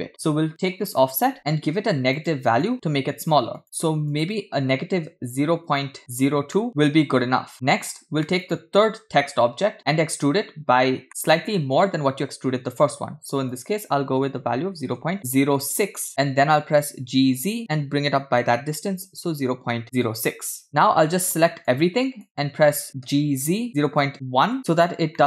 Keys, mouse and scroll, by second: 2.2 click, 3.6 click, 4.2 click, 5.5-6.1 scroll up 3, 6.4 scroll down 1, 6.5-7.5 middle drag, 8.4 click, 11.0-11.7 middle drag, 13.5-15.8 drag, 16.8 g, 20.6 middle click, 21.0-21.6 scroll down 1, 21.6-22.3 drag, 21.6-22.3 scroll down 1, 23.1 g, 25.1-25.2 middle drag.